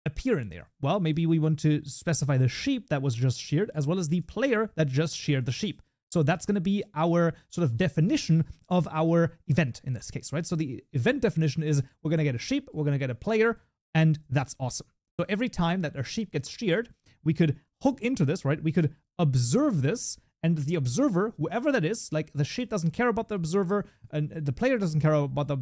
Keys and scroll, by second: 5.1 Tab, 5.7 ctrl+s.